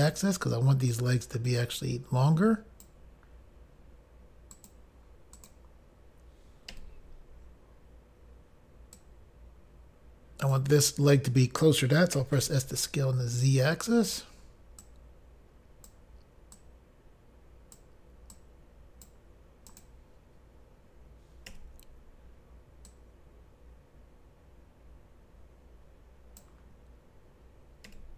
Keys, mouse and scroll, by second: 0.1 click, 0.2 click, 1.0 click, 4.6 click, 4.8 click, 5.5 click, 5.6 click, 6.8 i, 9.1 click, 14.2 click, 14.3 click, 14.9 click, 16.7 click, 18.5 click, 19.8 click, 19.9 click, 23.0 click, 28.0 i.